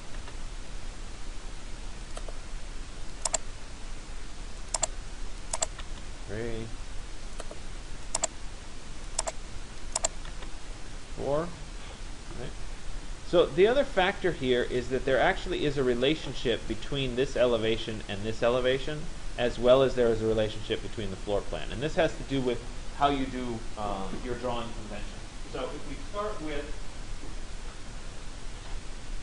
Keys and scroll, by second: 5.5 Return, 10.0 Return.